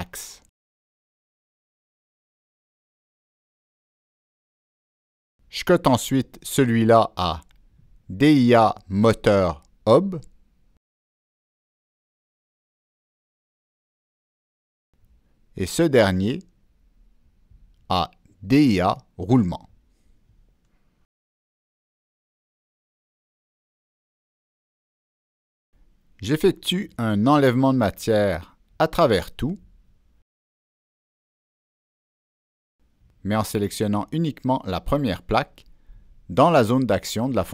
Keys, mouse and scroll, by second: 4.3 click, 5.1 click, 8.6 click, 9.4 click, 14.9 click, 16.3 click, 18.3 click, 18.9 click, 20.3 click, 21.0 click, 23.5 click, 24.6 click, 25.0 click, 26.6 click, 27.9 click, 28.6 click, 29.3 click, 33.0 click, 35.3 click, 37.4 click.